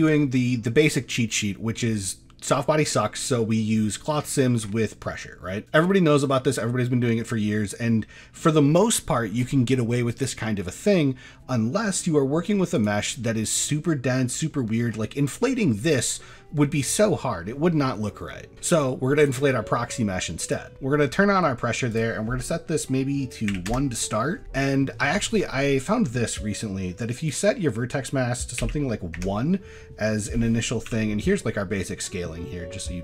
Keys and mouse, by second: 12.7 click, 13.3-14.5 middle drag, 17.1 middle click, 19.2 click, 20.4 click, 21.9-23.7 drag, 27.3-29.2 drag, 30.9 n.